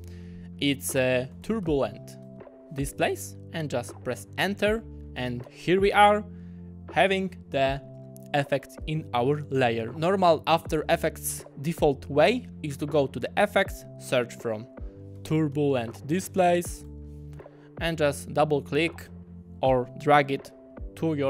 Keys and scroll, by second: 1.1-2.2 typing, 4.4 Return, 14.9-16.9 typing.